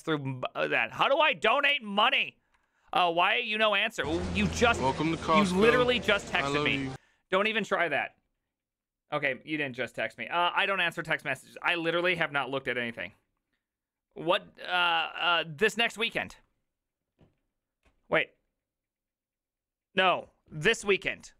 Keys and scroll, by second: 5.3 typing, 5.5 Return.